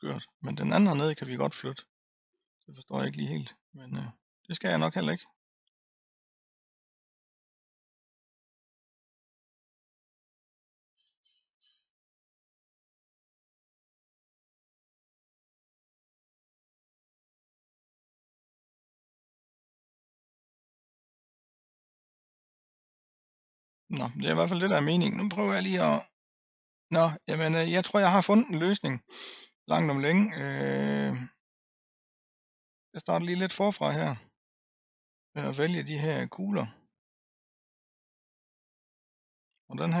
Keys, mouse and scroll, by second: 0.3-2.0 scroll down 3, 2.0-4.1 middle drag, 4.1 click, 5.1-6.2 scroll up 5, 6.2 click, 8.4 drag, 10.1-12.1 scroll down 219, 13.2-16.2 drag, 18.3-18.8 scroll down 3, 19.7-20.5 scroll up 3, 20.5-22.1 middle drag, 22.1-23.1 scroll up 5, 23.4-23.8 scroll down 4, 24.5 click, 30.6-32.2 middle drag, 32.2-32.9 scroll up 1, 32.9 click, 36.0 l, 37.4 l, 38.6 l, 39.0-40.0 middle drag.